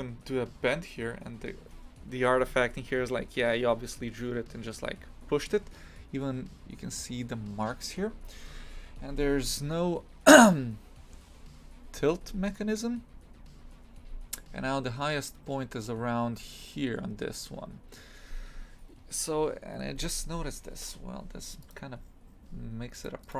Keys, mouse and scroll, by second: 0.6 scroll up 3.